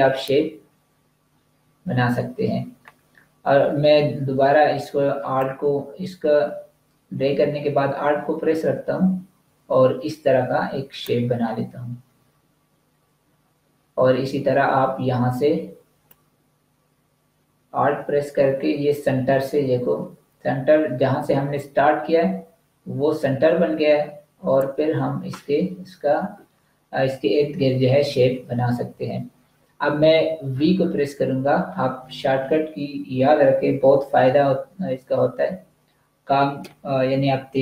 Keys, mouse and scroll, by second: 1.5-1.9 scroll down 1, 2.3-4.3 scroll up 1, 5.3 click, 12.7-14.9 scroll down 1, 16.0 click.